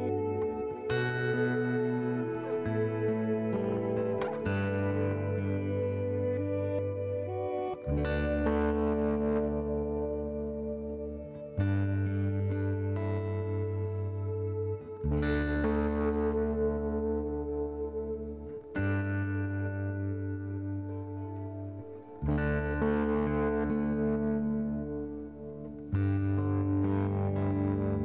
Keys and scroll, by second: 2.6-5.2 typing, 6.4-7.3 typing, 9.0-9.9 typing.